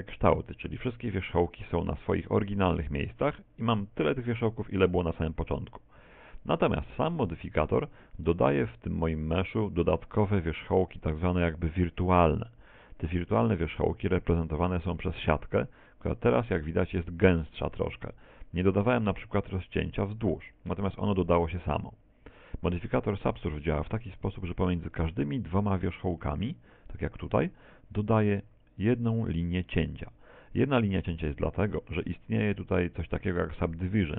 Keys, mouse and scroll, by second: 0.2 right click, 1.3 right click, 2.0 right click, 2.8 right click, 3.6 right click, 12.4 z, 13.2-13.9 scroll up 1, 13.9 middle click, 22.3 middle click, 24.2-24.6 scroll down 5, 24.8 shift+middle click, 25.8 right click, 26.8 shift+right click, 27.4 scroll up 4.